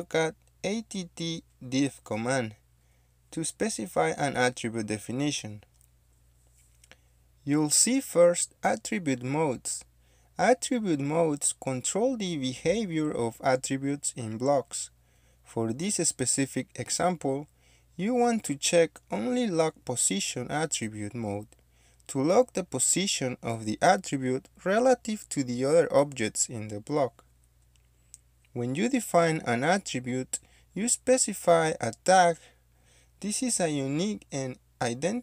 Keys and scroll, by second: 0.3 typing, 1.8-3.5 typing.